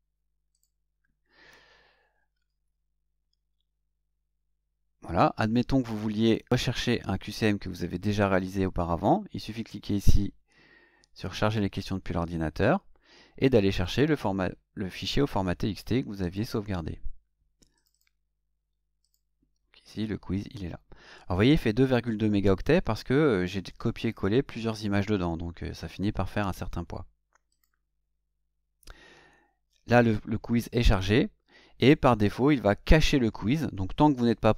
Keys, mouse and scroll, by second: 0.5 click, 11.4 click, 13.7 click, 16.2 click, 17.7 click, 19.0 click, 27.4 click.